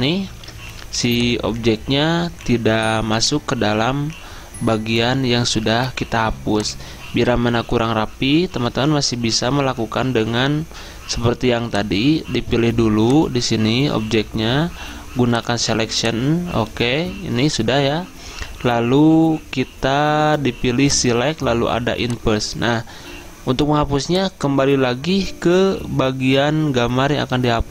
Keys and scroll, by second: 0.4 ctrl+d, 0.9 z.